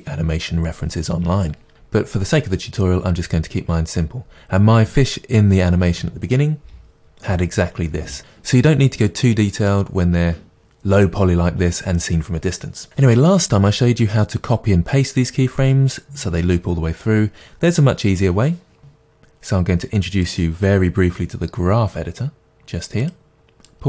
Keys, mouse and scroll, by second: 23.1 click.